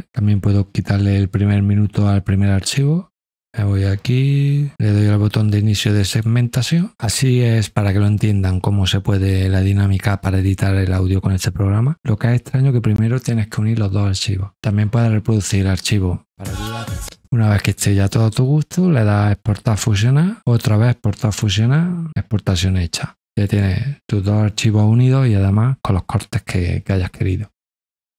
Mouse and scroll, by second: 3.4-4.7 drag, 5.5 click, 16.2 click, 16.8 click, 19.4 click, 20.6 click, 23.4 click.